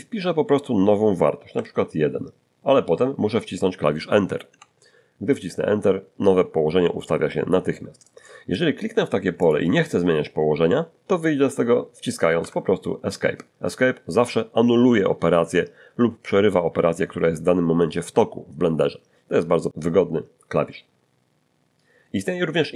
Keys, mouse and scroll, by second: 1.1 1, 4.2 Return, 6.2-6.6 scroll down 2, 6.9-8.7 middle drag, 9.4 click, 12.4 Escape, 16.9-18.1 middle drag, 18.6 scroll up 2.